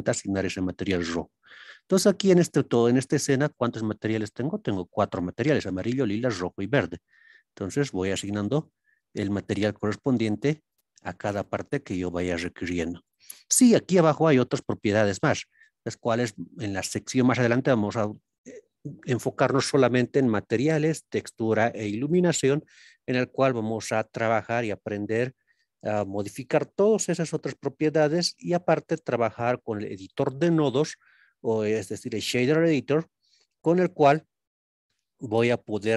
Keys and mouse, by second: 0.0 click, 1.7-8.3 drag, 9.7-10.8 drag, 11.2 click, 12.0-13.1 drag, 14.8-17.5 drag, 25.0 click, 26.3 click, 30.2-31.3 middle drag, 32.1-32.5 middle drag, 34.1 middle drag, 35.0 click.